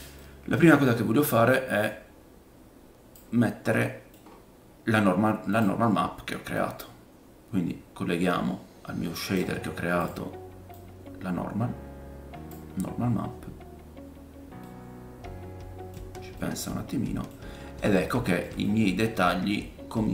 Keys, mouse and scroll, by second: 0.6-1.5 scroll up 1, 1.8 middle click, 1.8 right click, 3.8 middle click, 4.2-4.9 scroll up 1, 5.6-6.6 drag, 9.4 click, 9.4 middle click, 9.4-15.9 right drag, 10.5-11.2 typing, 10.7-15.9 drag, 10.7-20.1 middle drag, 12.3-13.0 typing, 17.6-17.9 scroll up 1.